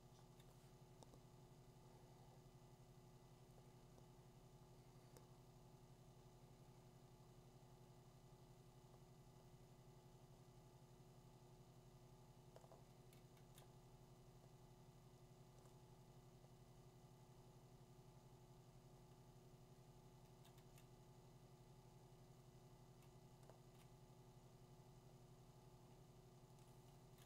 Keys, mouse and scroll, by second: 12.9 [, 13.4 [, 20.2 [, 20.5 [, 23.0 ], 23.5 ], 23.6 ], 26.7 click, 26.7 ].